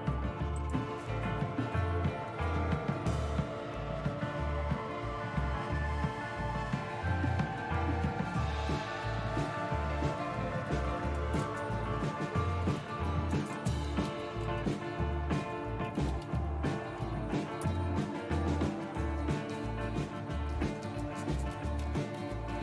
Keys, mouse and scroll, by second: 0.9-3.9 drag, 3.9 super+2, 5.0 super+1, 7.8 2, 10.6-11.4 typing, 12.5-18.1 typing, 21.3-22.6 typing.